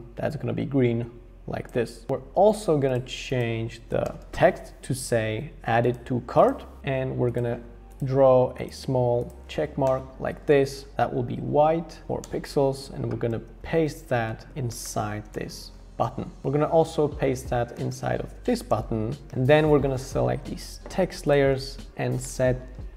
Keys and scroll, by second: 2.5 t, 4.0-5.3 typing, 9.8 Return, 12.0 Up, 12.2 Return, 13.4 super+x, 14.4 super+v, 14.8 super+[, 15.3 shift+Return, 16.4 Down, 17.9 super+c, 18.6 super+v, 19.3 super+[.